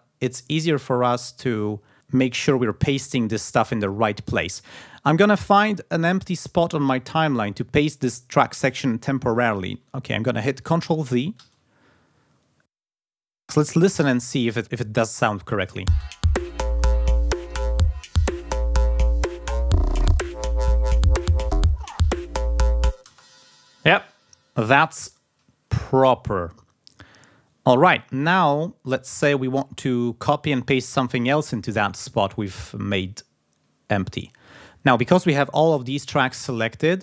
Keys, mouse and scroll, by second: 0.5-1.9 drag, 4.4 ctrl+scroll down 2, 5.9-7.2 ctrl+scroll down 3, 11.1 ctrl+v, 15.5 space, 22.7 scroll down 2, 22.8 space, 24.2 ctrl+scroll down 2, 26.8 ctrl+scroll up 2, 27.9 ctrl+scroll down 2, 31.2 scroll up 2.